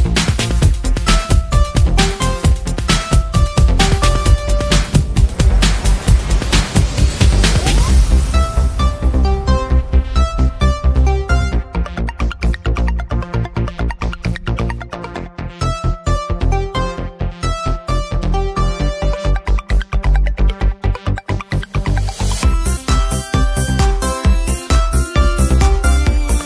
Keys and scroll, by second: 4.8-8.4 typing, 6.2 Return, 19.4 Return.